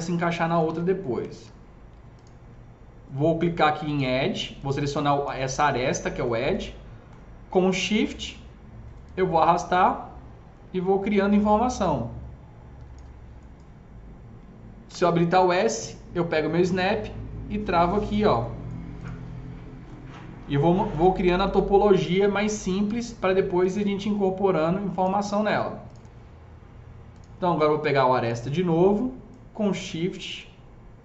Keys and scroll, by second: 0.6 ctrl+z, 1.3 ctrl+z, 14.7 s, 22.8 s.